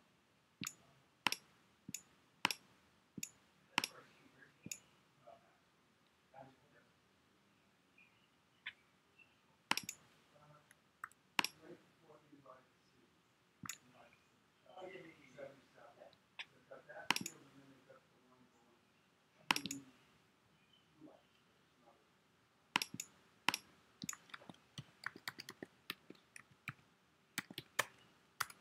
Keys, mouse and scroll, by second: 24.2-28.6 typing.